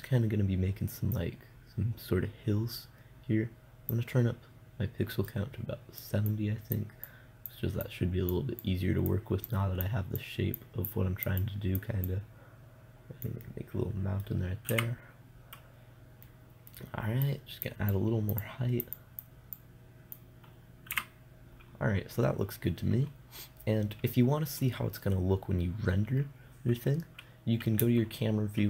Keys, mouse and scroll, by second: 1.6-2.9 middle drag, 1.6-2.9 right drag, 2.9-5.7 drag, 5.7-6.7 middle drag, 6.7-14.4 drag, 14.1-15.2 middle drag, 15.2 KP_0, 17.7-21.4 drag, 21.4 KP_0.